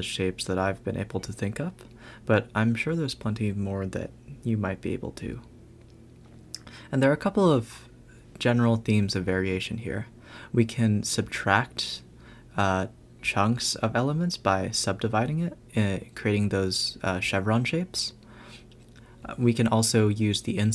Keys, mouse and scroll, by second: 1.1-1.6 scroll up 4, 2.2-3.2 scroll down 3, 4.4 g, 6.9 a, 7.1 a, 11.4 b, 15.7 a, 15.9 a, 16.7 click, 17.0 x, 18.5 click, 19.7 shift+d.